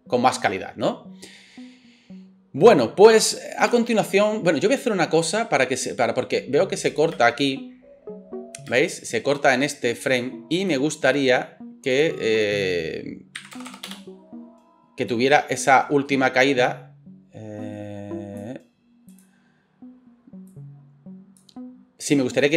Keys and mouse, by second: 3.7 space, 7.1 space, 8.7 space, 13.7 KP_0.